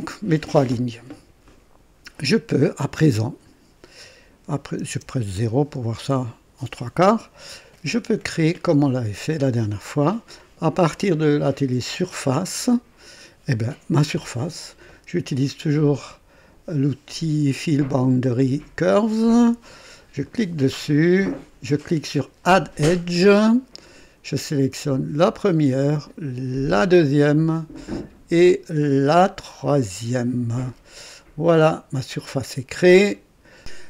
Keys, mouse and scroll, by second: 1.4-2.6 drag, 2.6 click, 4.8 KP_0, 6.1 right click, 12.4 click, 20.2 click, 22.4 click, 24.9 click, 26.6 click, 29.6 click, 32.9 click.